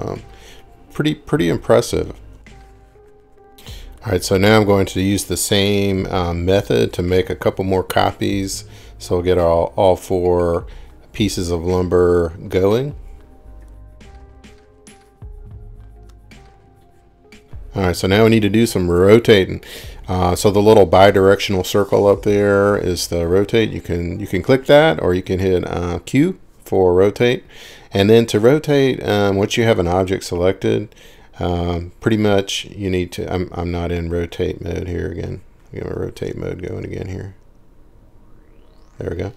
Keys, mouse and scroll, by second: 1.7-2.0 scroll, 2.0 click, 2.4 m, 11.5 ctrl+click, 16.1 ctrl+click, 20.0-21.2 scroll, 26.8-27.9 scroll up 5, 27.9-28.7 scroll up 5, 29.1 scroll, 29.5 middle click, 33.5 click, 34.5 r, 36.1 Escape, 36.3 Escape, 36.9 Escape, 37.6 Escape, 38.8 click.